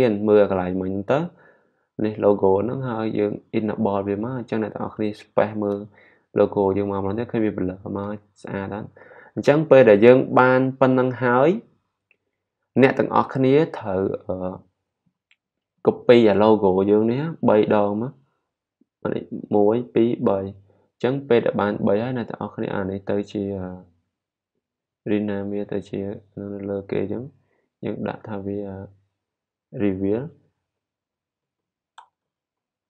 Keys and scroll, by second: 19.3 super+d, 20.0 super+d, 30.1-32.8 typing.